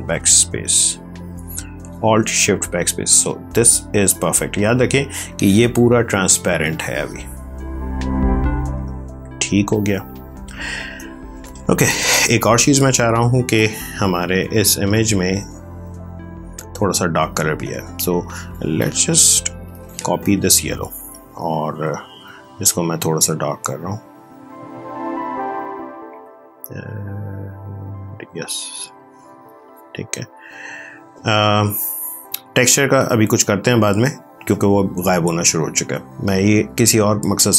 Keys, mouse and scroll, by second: 0.0 ctrl+click, 0.1 ctrl+space, 2.1 ctrl+click, 4.7 v, 5.1 click, 7.9 click, 8.8 space, 9.3 ctrl+click, 15.8 click, 18.0 ctrl+z, 19.3 ctrl+j, 21.7 ctrl+l, 23.2 click, 29.4 click, 36.1 click.